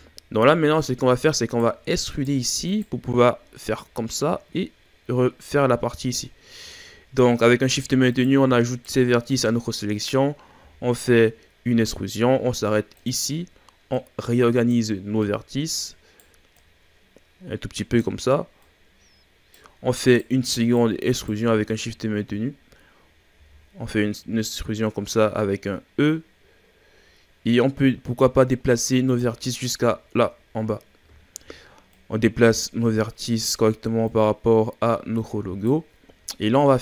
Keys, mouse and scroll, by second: 0.2-1.5 scroll up 2, 1.5 right click, 2.1 shift+right click, 2.7 shift+right click, 6.3-8.1 ctrl+scroll up 2, 8.1 right click, 8.7 shift+right click, 9.3 shift+right drag, 10.6 e, 13.3-13.9 scroll up 1, 13.9 right click, 15.2 right click, 16.6 right click, 18.6 right click, 20.1 right drag, 20.6 shift+right drag, 21.1 shift+right click, 21.7-23.4 shift+scroll down 5, 23.4 e, 29.4-29.9 scroll down 4, 29.9-31.0 ctrl+scroll up 6, 31.3-31.9 shift+scroll down 2, 31.9 right click, 34.1 right click.